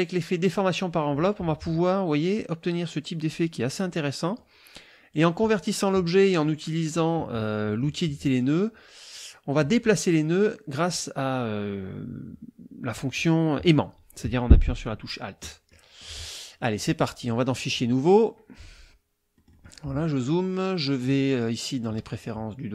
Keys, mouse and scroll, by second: 3.8 middle click, 3.8-4.5 scroll up 1, 5.1 click, 8.2 click, 15.7 middle click, 15.7-16.2 scroll up 1, 17.2 click, 17.7 click, 19.3 middle click, 21.0 click.